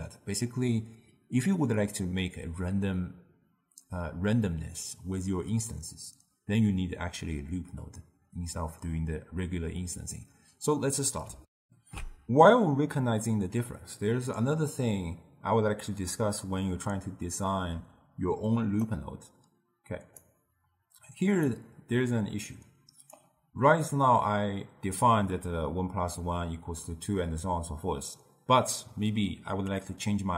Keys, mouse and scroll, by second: 11.5 ctrl+alt+shift+q, 17.7-18.7 d, 18.7-20.1 right drag, 20.1-21.2 d, 21.4-23.0 right drag, 23.0 d, 23.2 d, 29.7-30.3 middle drag.